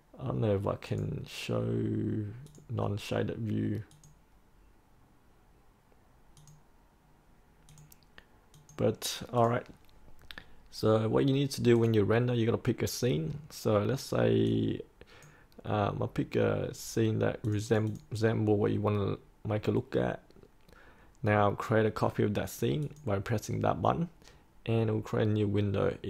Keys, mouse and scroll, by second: 0.8-15.5 drag.